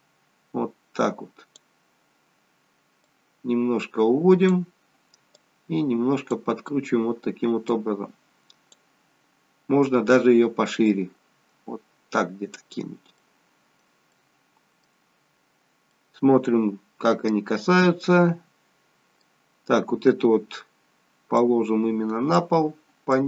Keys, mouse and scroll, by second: 3.0 click, 5.3 click, 10.8 click, 13.1 middle click, 14.1 middle click, 15.9 middle click, 18.0 middle click, 21.3 click, 23.1 click.